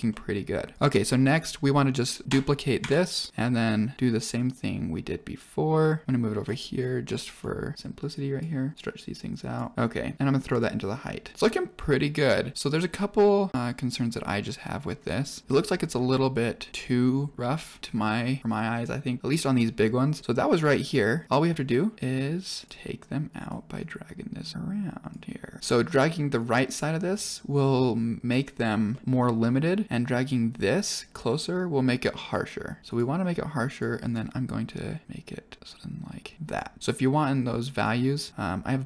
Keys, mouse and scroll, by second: 0.0 middle click, 0.6 click, 1.2 click, 2.0 scroll down 2, 2.2 shift+click, 2.8 shift+d, 3.3-3.9 drag, 4.5-5.3 drag, 6.0 click, 8.1 click, 8.6 click, 9.0 click, 9.7-10.6 drag, 11.0 click, 11.3 middle click, 15.4 middle click, 17.8 middle click, 18.2 scroll up 2, 18.4 middle click, 18.7 scroll down 2, 20.1 scroll up 2, 20.7 click, 23.2 click, 23.8 click, 25.6 middle click, 25.6 scroll up 6, 26.3 click, 28.8 scroll up 1, 28.8 middle click, 29.8 click, 33.6 click, 34.0 click, 36.4 click, 37.6 click, 38.8 click.